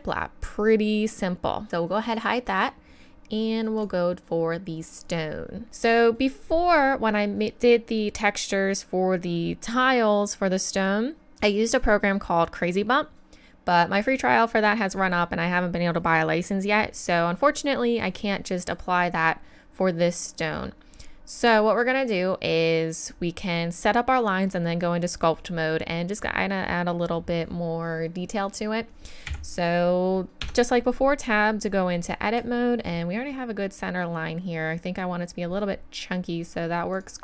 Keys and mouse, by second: 29.3 KP_1, 30.4 Tab, 37.0-37.2 right drag.